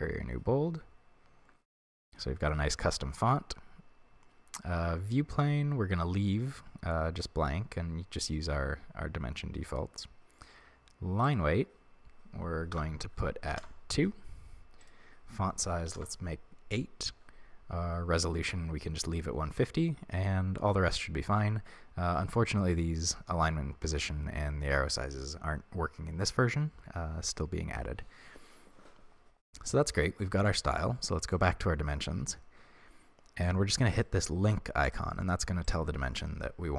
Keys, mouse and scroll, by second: 13.6-34.0 drag, 34.8 click, 35.6 click.